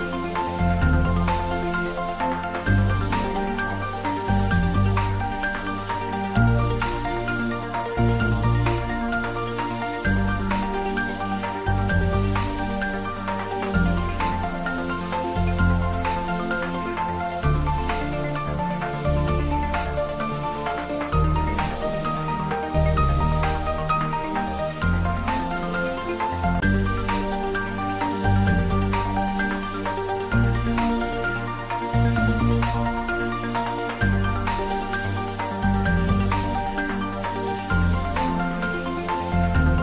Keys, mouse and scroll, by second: 3.9 click, 4.5 scroll down 1, 6.1-6.6 scroll up 1, 8.3 click, 11.5-12.5 scroll down 1, 12.5-13.1 middle drag, 13.9 click, 16.9 Tab, 17.7 click, 20.6-21.5 right click, 21.2 click, 22.9-23.7 right drag, 24.6 click, 27.1-27.6 scroll down 1, 27.6 scroll up 1, 28.3-28.9 middle click, 29.3 click, 31.6 click, 31.7-32.4 right drag, 34.5 8, 35.2 Return, 36.5 Tab, 37.0-37.5 scroll down 1, 37.5-38.0 scroll up 1, 38.0 middle click.